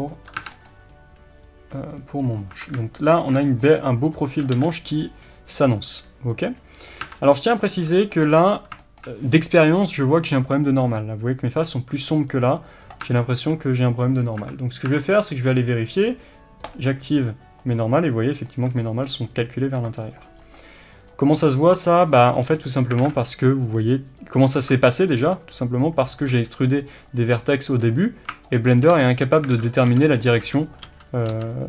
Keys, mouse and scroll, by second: 0.3 click, 0.4 scroll down 1, 0.7-3.1 middle drag, 2.5 Tab, 3.1 alt+click, 3.4 scroll down 1, 3.6-7.9 middle drag, 4.3 scroll up 1, 4.5 alt+a, 7.0 Tab, 7.9 click, 8.2-8.6 scroll up 1, 8.8-16.6 shift+middle drag, 13.0 Tab, 13.4 a, 14.4 Tab, 16.6-17.7 drag, 17.7-22.1 middle drag, 19.1 scroll down 2, 19.9 scroll down 2, 20.0-21.6 scroll up 2, 21.6-22.1 scroll up 1, 22.1 click, 22.4 scroll up 2, 22.7-25.5 middle drag, 23.0 alt+a, 24.6 scroll down 2, 25.5 click, 26.3 e, 27.0 click, 27.7 e, 28.0 click, 28.9 f, 29.2-30.3 middle drag, 29.5 alt+a, 30.1 b, 30.3 click, 30.7 b, 31.2 click, 31.3 e.